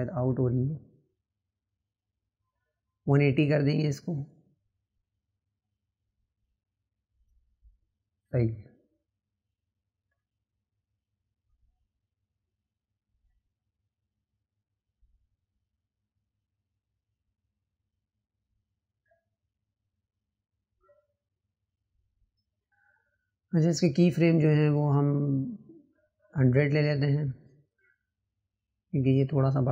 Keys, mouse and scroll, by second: 2.5 ctrl+z, 5.4-10.1 drag, 11.1 click, 13.7 click, 15.2 click.